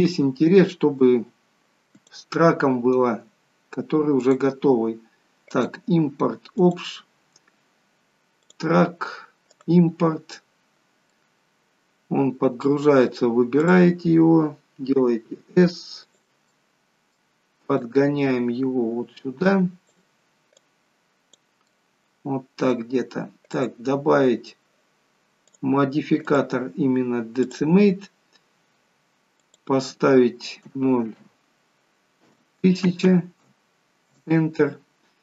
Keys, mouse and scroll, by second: 1.9 click, 4.2 click, 11.1 middle click, 13.6 click, 14.9 s, 16.5 middle click, 17.7 click, 20.5 click, 21.7 middle click, 23.5 click, 25.5 click, 29.4 click, 33.0 0.